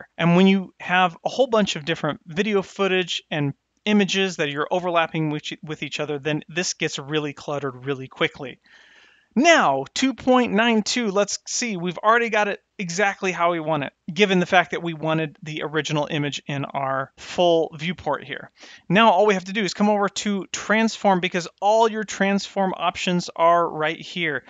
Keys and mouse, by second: 11.4 click, 20.4 click.